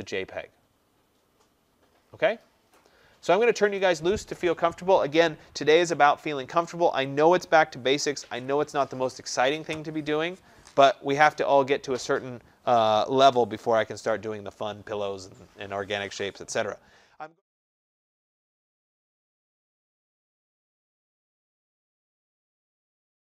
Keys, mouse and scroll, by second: 4.0 click.